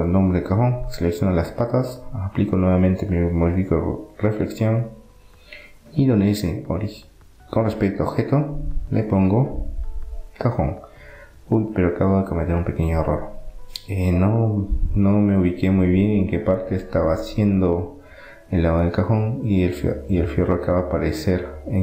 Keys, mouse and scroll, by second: 0.0-2.1 drag, 6.6-8.5 drag, 8.8-10.8 middle drag, 14.5-17.5 middle drag, 20.5-21.8 middle drag.